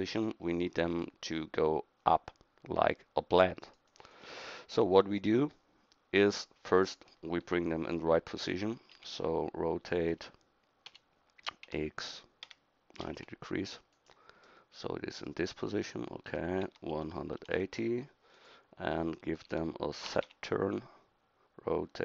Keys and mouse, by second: 3.6-8.9 drag, 8.9 e, 10.9 r, 16.3 r, 20.1 r.